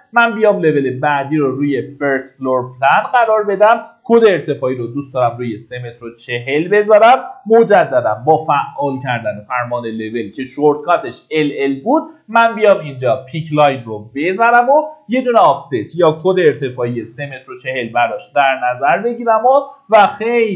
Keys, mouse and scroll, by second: 3.5 ctrl+a, 4.0 KP_3, 4.2 KP_Decimal, 4.6 KP_4, 6.3 click, 7.4 typing, 12.9 click, 16.0 KP_3, 16.3 KP_Decimal, 16.6 KP_4.